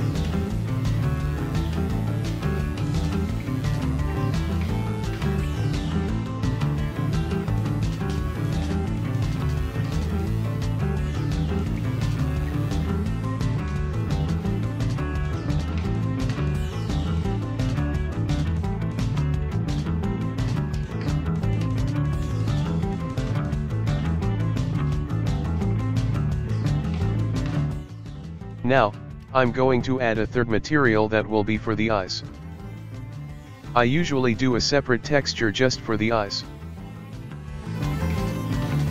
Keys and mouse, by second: 0.6-8.5 ctrl+middle drag, 8.5 click, 9.4 right click, 10.7-12.6 drag, 12.6 right click, 13.4-15.2 drag, 15.2-17.2 ctrl+middle drag, 17.4-18.0 drag, 18.0 middle click, 18.9-20.0 drag, 20.0-22.5 ctrl+middle drag, 22.5 right click, 24.1-27.6 drag, 27.6-30.1 shift+middle drag, 30.1-35.4 drag.